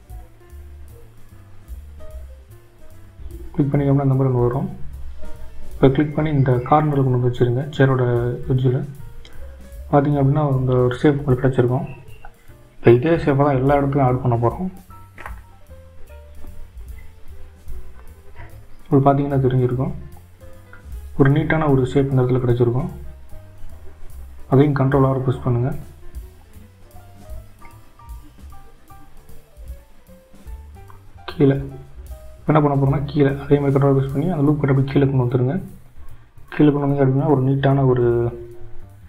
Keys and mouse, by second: 0.0 click, 2.8 ctrl+r, 10.4 click, 12.8 Tab, 15.3 Tab, 17.1-18.5 drag, 31.2 ctrl+r.